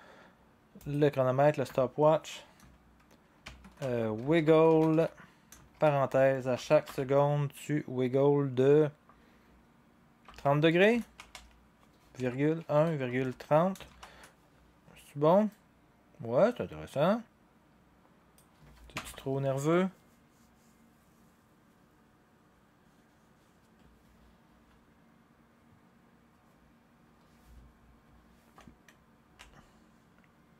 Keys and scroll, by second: 3.8-7.3 typing, 10.0-14.2 typing, 17.4-19.0 typing, 29.3 0.